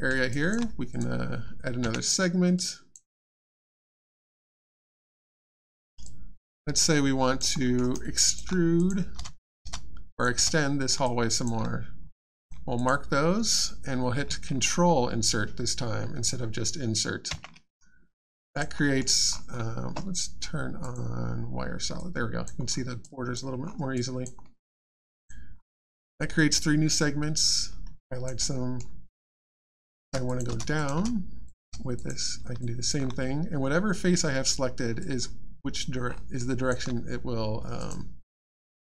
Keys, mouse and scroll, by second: 0.3 alt+click, 0.9 click, 0.9 click, 2.5 alt+click, 3.1 alt+middle click, 3.6 alt+click, 4.3 alt+middle click, 4.7 alt+scroll up 1, 4.9 alt+click, 5.4 alt+middle click, 6.0 alt+click, 7.6 alt+middle click, 7.9 alt+click, 8.7 click, 8.8 click, 9.1 space, 9.3 click, 9.6 space, 10.1 click, 10.3 space, 11.0 alt+click, 12.1 click, 12.7 click, 18.3 alt+click, 18.8 alt+middle click, 19.3-20.3 alt+scroll up 1, 20.8 click, 21.9 click, 22.3 alt+click, 22.6 alt+scroll down 2, 23.6-23.9 alt+scroll up 1, 23.9 alt+click, 24.4 alt+middle click, 24.6 alt+scroll down 1, 24.9 alt+click, 27.9 alt+click, 28.5 alt+middle click, 28.8-29.1 alt+scroll down 1, 29.1 alt+click, 29.8 shift+click, 30.0 shift+space, 30.2 click, 30.3 click, 30.5 space, 30.7 click, 30.9 space, 31.4 click, 31.6 space, 31.9 click, 32.6 alt+click, 35.0 alt+click, 36.0 alt+scroll up 1, 36.4 alt+click, 37.8 click.